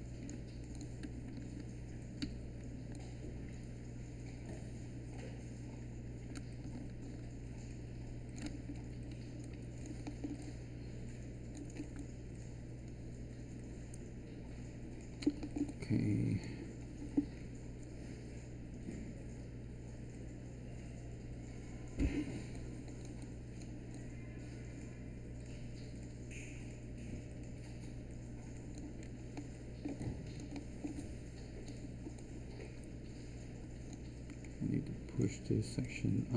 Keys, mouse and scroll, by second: 2.2 w.